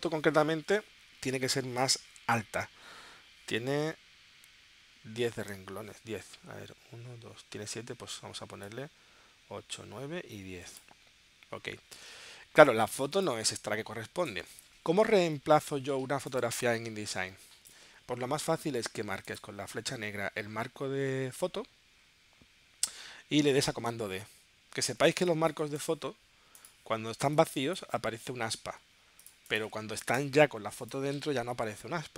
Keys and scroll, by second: 16.5 space, 25.2 space, 25.7 space, 28.8 v, 30.2 BackSpace.